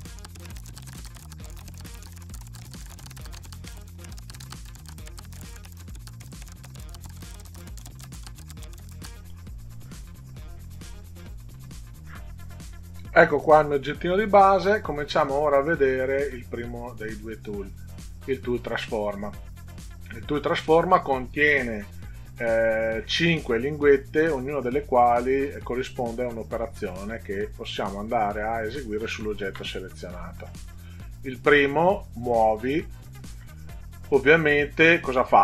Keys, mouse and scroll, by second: 0.4 click, 0.6 click, 0.8 click, 0.9 click, 1.1 click, 1.7 click, 2.0 click, 2.2 click, 2.7 click, 3.0 click, 3.4 click, 3.6 click, 3.8 click, 4.0 click, 4.2 click, 4.6 click, 4.8 click, 5.3 click, 5.5 click, 5.6 click, 5.8 click, 6.3 click, 7.4 click, 7.7 click, 8.3 click, 8.6 click, 8.7 click, 8.9 click, 9.0 click, 9.1 middle click, 17.8 click.